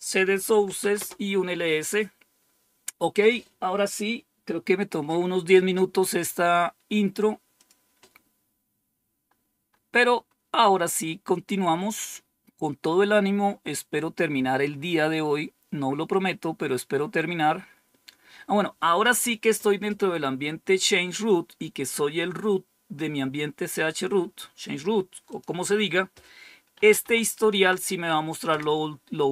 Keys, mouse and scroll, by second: 0.0-1.1 typing, 7.5 click, 9.1 scroll down 2, 9.6-11.7 scroll down 8, 12.2-13.0 scroll down 2, 13.5-14.6 scroll down 2, 25.2 click, 26.4-27.4 typing, 27.5 Tab, 28.4 Return.